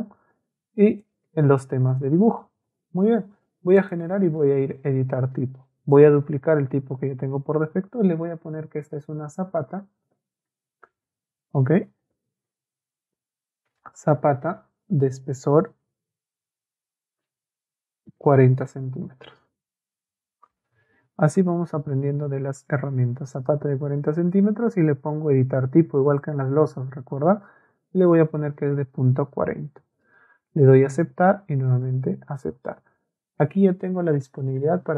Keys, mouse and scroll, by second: 1.0 ctrl+middle click, 3.8 middle click, 8.7-10.1 typing, 11.8-14.3 typing, 18.2 KP_4, 19.2 c, 20.6 m.